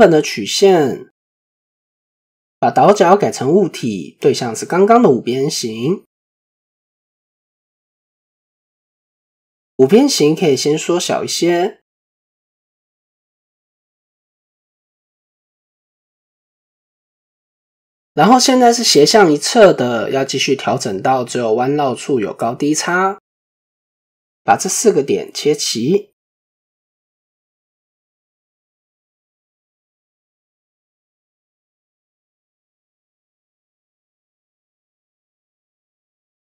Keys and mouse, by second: 0.1 shift+middle click, 1.3 click, 3.0 click, 4.2 click, 7.1-7.9 right drag, 14.7-15.3 middle drag, 15.5 middle click, 16.3-18.0 middle drag, 18.8 middle click, 20.7 KP_1, 21.0 Tab, 21.6 middle click, 23.3 shift+click, 27.9 click, 28.3 middle click, 29.1-30.9 middle drag, 31.0 typing, 32.2 click, 32.5 Tab, 33.9 click, 34.7 shift+middle click.